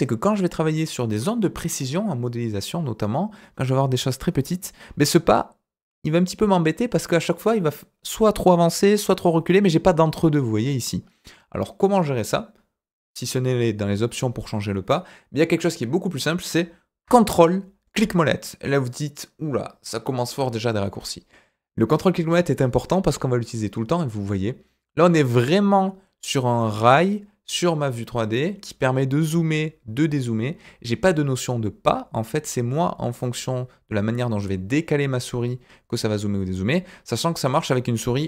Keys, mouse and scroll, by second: 4.2-4.8 scroll up 1, 4.8-5.5 scroll up 1, 5.5-6.7 scroll down 1, 6.7 scroll down 2, 7.2-8.0 scroll up 1, 8.0-8.9 scroll up 1, 8.9-9.6 scroll down 1, 9.6-9.9 scroll up 1, 9.9 scroll down 1, 10.2-10.5 scroll up 1, 10.5-10.9 scroll down 1, 10.9-11.3 scroll up 1, 11.3-12.1 scroll down 2, 12.1 scroll down 2, 17.8-38.2 ctrl+middle drag.